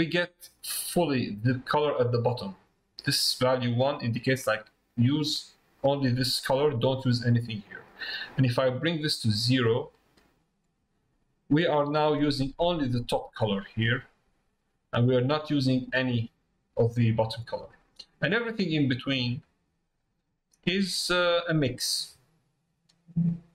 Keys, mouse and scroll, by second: 8.9-11.1 drag, 18.4-23.5 drag.